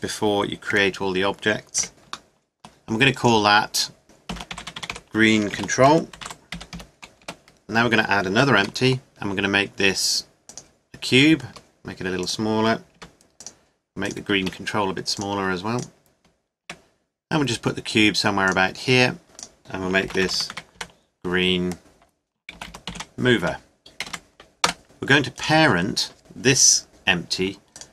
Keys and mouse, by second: 0.5 middle click, 0.7 KP_Decimal, 1.8 KP_7, 1.9 g, 3.2 click, 4.8 e, 8.6 shift+a, 11.5 s, 12.9 g, 14.4 s, 15.0 click, 16.6 g, 19.5-20.5 drag, 20.5 e, 25.3-26.5 drag, 27.7-27.9 drag.